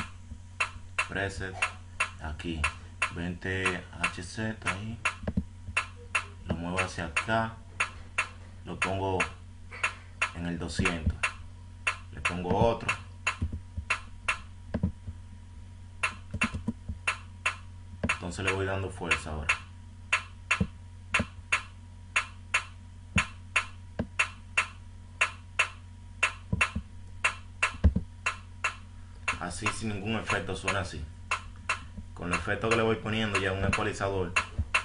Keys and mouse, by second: 11.1 drag, 11.4 click, 15.0 click, 27.0 click, 34.7 click.